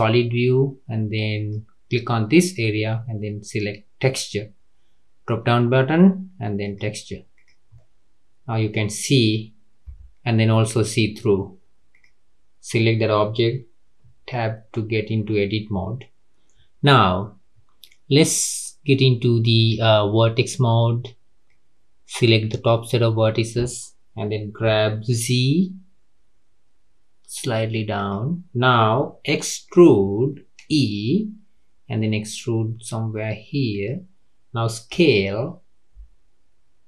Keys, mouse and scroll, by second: 1.3-4.4 drag, 7.4 click, 7.8-9.9 middle drag, 9.9 KP_3, 12.0 click, 14.0 Tab, 19.5 click, 21.5 click, 24.6 g, 29.7 e, 34.9 s.